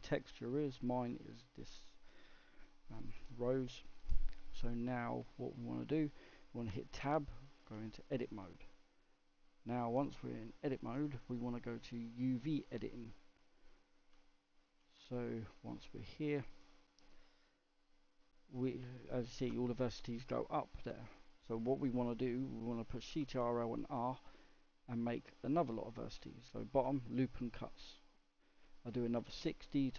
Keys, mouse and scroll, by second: 6.6 Tab, 8.9-11.9 middle drag, 12.1-14.2 drag, 14.2-16.6 shift+middle drag, 16.6 click, 17.4 click, 21.0-23.7 middle drag, 23.7 ctrl+r.